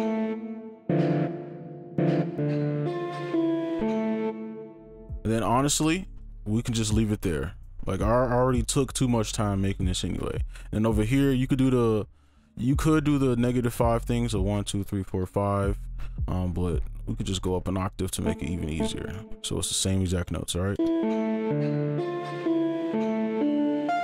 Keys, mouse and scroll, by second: 0.4 right click, 1.2-2.7 typing, 2.0 right click, 4.2 space, 4.3 ctrl+a, 4.5 space, 6.2 shift+click, 7.5 double click, 9.1 ctrl+b, 10.2 ctrl+a, 11.1 shift+click, 12.4 shift+scroll down 1, 13.6 scroll down 1, 13.6-14.2 scroll up 1, 14.3 shift+Down, 14.6 shift+Down, 14.8 shift+Down, 15.1 shift+Down, 15.3 shift+Down, 16.2 shift+Up, 16.4 shift+Up, 16.6 shift+Up, 16.8 shift+Up, 17.0 shift+Up, 17.7-18.2 ctrl+scroll up 2, 18.2 alt+right click, 18.8 alt+right click, 19.1 ctrl+right click, 20.2 double click, 21.5 space.